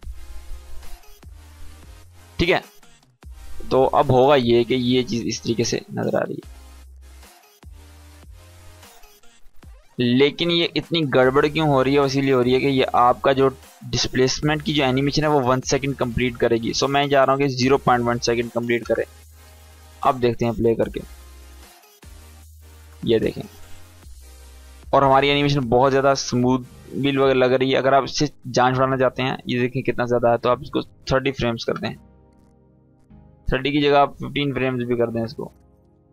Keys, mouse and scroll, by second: 0.7-3.4 drag, 5.5 space, 9.4 space, 9.9-10.5 drag, 19.4 space, 22.6 space, 22.9-23.6 click, 23.5 space, 25.9-28.0 drag, 28.5-30.2 scroll up 1, 30.2 click, 33.3 click.